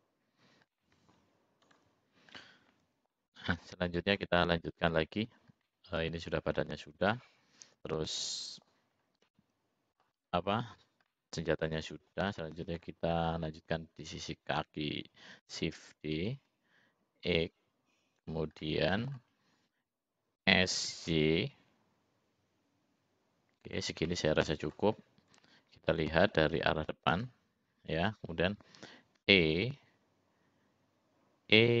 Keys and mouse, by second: 0.8 middle click, 2.5 middle click, 3.7 middle click, 5.8 middle click, 6.8-9.1 middle drag, 9.8 middle click, 11.6 middle click, 13.1 middle click, 16.9 shift+d, 19.3 middle click, 21.2 s, 24.9 middle click, 26.3 middle click, 30.2 e.